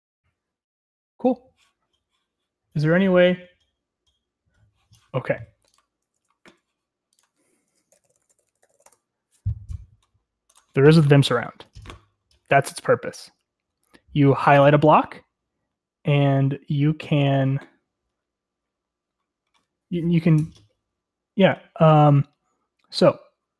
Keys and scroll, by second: 7.6 ctrl+t, 11.6 Return, 11.6 typing.